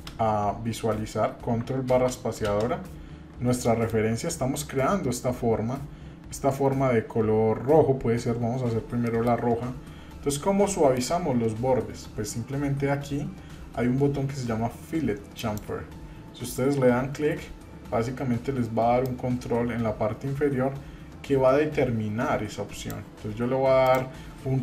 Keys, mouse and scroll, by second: 2.5 ctrl+space, 3.2-3.6 scroll down 2, 3.6 shift+middle click, 9.0-9.5 shift+middle drag, 10.2-10.5 scroll up 1, 10.7 shift+middle click, 15.4 click, 19.0-22.9 drag, 23.8-24.6 drag.